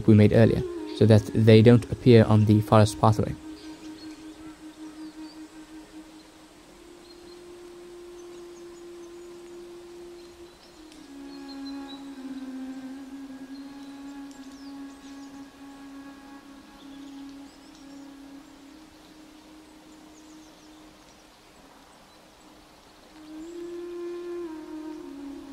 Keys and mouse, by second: 1.4 middle click, 2.0 click, 2.3 middle click, 2.4 click, 2.6 middle click, 5.9-8.0 drag, 8.9 click, 9.5-10.5 drag, 10.8 click, 11.8 click, 12.5 click, 13.3 click, 14.3 click, 15.1 click, 15.2-17.0 middle drag, 17.0 click, 19.7-21.0 drag, 21.4 click, 21.6 click, 21.8 middle click, 22.2 shift+w.